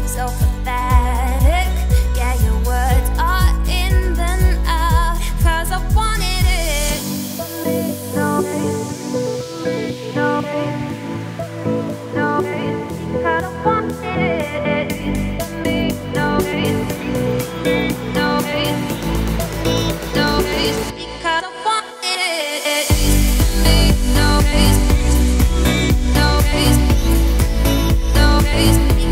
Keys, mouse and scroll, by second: 0.3 click, 0.5 `, 1.0-2.8 scroll down 31, 2.8 middle click, 3.6 ctrl+b, 5.7 shift+click, 6.6 ctrl+b, 10.5 click, 11.1 shift+click, 11.3 shift+middle click, 12.1 shift+click, 13.0 ctrl+b, 15.7-16.4 scroll down 7, 16.4 click, 16.7 `, 17.3-18.0 scroll down 13, 18.0 ctrl+b, 20.2-21.3 scroll down 13, 21.3 click, 21.6 `, 22.0-23.4 scroll down 32, 23.4 middle click, 23.8-24.3 scroll up 5, 24.3 ctrl+b, 26.1 Tab, 26.3-26.7 scroll down 9, 26.7-27.6 middle drag, 27.6 ctrl+s, 27.9 scroll down 2, 28.2 shift+middle drag, 28.5 scroll up 1, 28.5 a, 28.9 `.